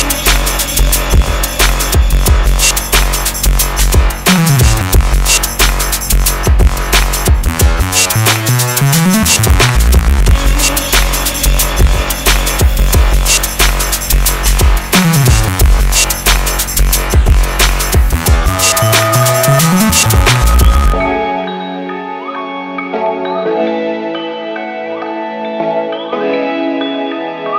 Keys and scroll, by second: 3.4 Return, 12.9 Delete, 22.0 Return, 22.8 Return.